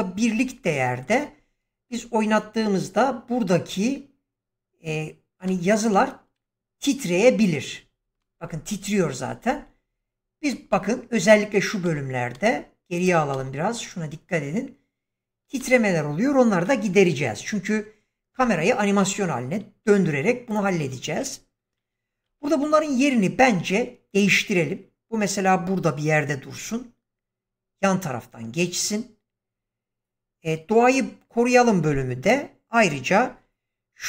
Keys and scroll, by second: 5.4 space, 18.2 shift+Left, 22.2 g, 33.2 g.